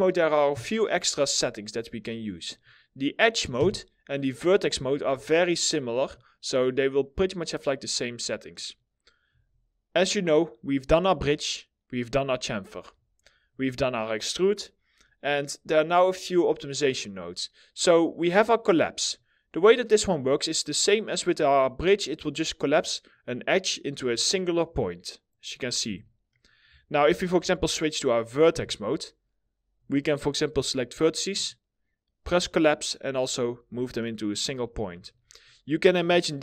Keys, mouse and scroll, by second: 1.5 middle click, 3.1 1, 4.5 2, 8.0 middle click, 8.5-8.8 scroll up 1, 13.3-14.5 alt+scroll up 1, 14.5 middle click, 25.3 ctrl+z, 25.8 middle click, 26.8-27.3 scroll up 1, 27.4 middle click, 28.0 1, 33.1-33.5 scroll down 1, 33.5 middle click, 34.4 ctrl+z, 34.7 middle click, 35.1 scroll up 1, 35.7 alt+middle click, 36.2-36.4 scroll up 1.